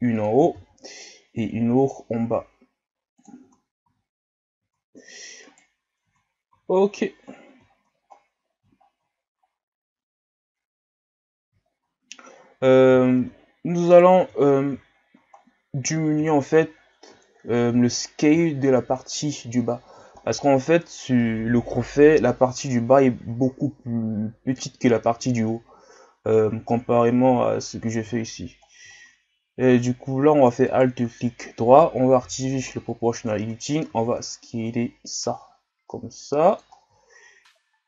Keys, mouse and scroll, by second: 0.5 ctrl+r, 3.4 Tab, 3.9 a, 4.7 Tab, 4.7-6.1 right drag, 6.1 Tab, 6.5 a, 6.8-7.4 scroll down 7, 7.7-8.2 shift+scroll up 2, 8.8 shift+scroll up 1, 9.5 scroll down 5, 10.4-11.7 scroll up 2, 11.7 shift+scroll down 3, 12.0 scroll up 4, 12.6-13.2 scroll down 2, 13.4-13.9 scroll up 1, 13.9 right click, 14.2 Tab, 14.9-15.3 shift+scroll down 1, 15.3-16.4 scroll up 1, 16.4-16.9 shift+scroll down 5, 17.2 shift+scroll up 1, 17.7-18.5 shift+scroll up 6, 18.5 shift+scroll down 4, 19.0 scroll up 2, 19.7 scroll down 1, 20.0-23.1 shift+scroll up 4, 23.1 shift+scroll up 1, 28.1-28.5 shift+scroll down 5, 28.5 scroll up 5, 29.3 scroll up 1, 30.7 alt+right click, 32.2 o, 32.7 scroll down 3, 33.9 s, 36.7 scroll down 3, 37.0-37.8 shift+scroll up 13.